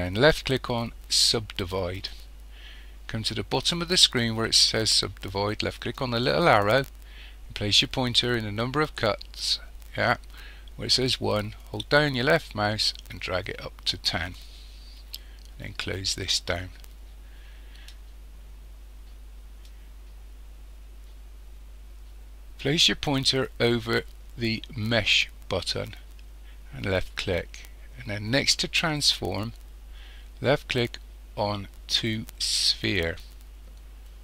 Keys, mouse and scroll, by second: 6.0 click, 11.6-16.1 drag, 26.9-34.2 drag.